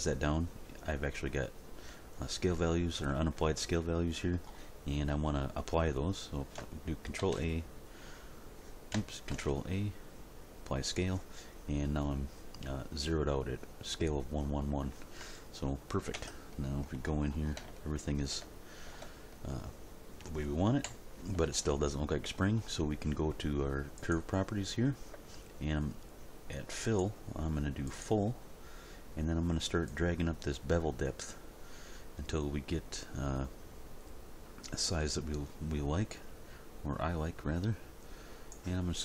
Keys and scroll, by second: 7.2 ctrl+a, 9.3 ctrl+a, 16.1 Tab, 20.8 End.